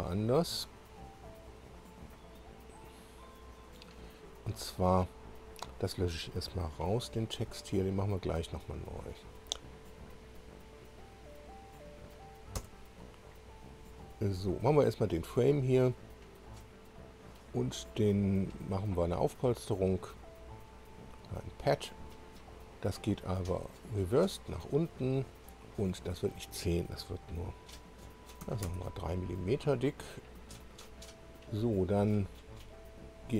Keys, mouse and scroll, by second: 4.4 click, 5.5 click, 12.6 Delete, 13.8 click, 15.6-16.0 scroll down 1, 16.3 click, 20.0 click, 23.7 click, 26.1 click, 28.4 3, 31.6-32.0 scroll up 1, 32.8-33.3 scroll up 4.